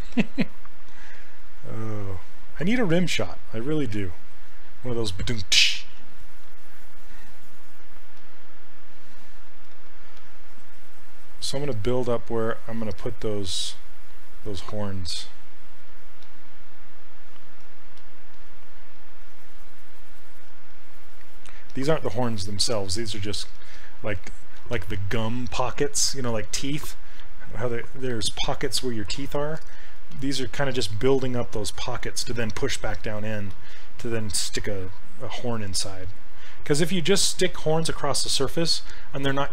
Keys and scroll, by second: 9.8 s, 18.0 s.